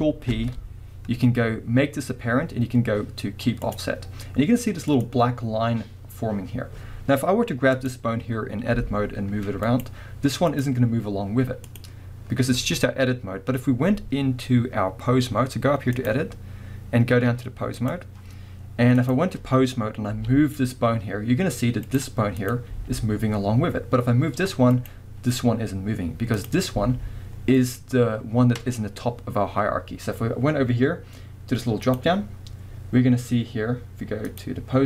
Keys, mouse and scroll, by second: 0.3 ctrl+p, 4.9 click, 7.7 click, 8.7 g, 9.8 right click, 10.5 click, 11.7 click, 16.0-19.1 drag, 20.1 g, 22.0 right click, 22.4 click, 22.7 g, 24.9 right click, 26.4 click, 26.7 g, 27.7 right click, 31.8 click, 34.3 click.